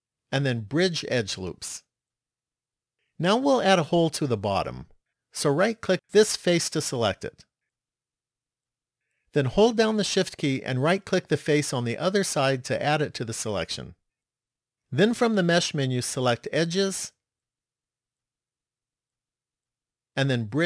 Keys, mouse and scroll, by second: 4.3 middle click, 6.6 right click, 8.0 middle click, 11.3 shift+right click, 14.8 click.